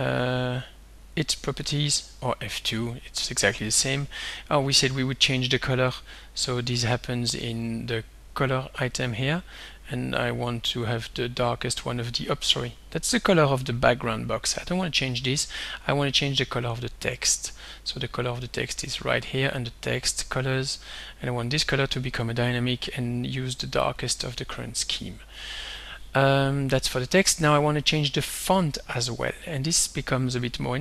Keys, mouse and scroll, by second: 2.0 click, 3.4-4.8 drag, 6.8 click, 8.2 click, 10.5 click, 14.4 click, 16.4 click, 18.3 click, 21.5 click, 24.0 click.